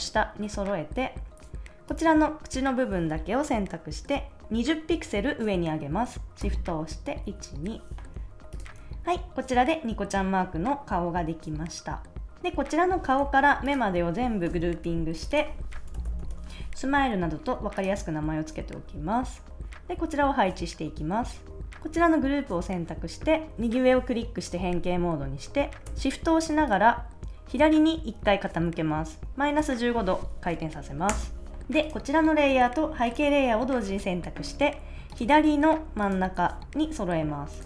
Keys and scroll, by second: 7.2 shift+Up, 8.7 super+s, 14.4 super+g, 15.4-16.8 typing, 31.0 Return.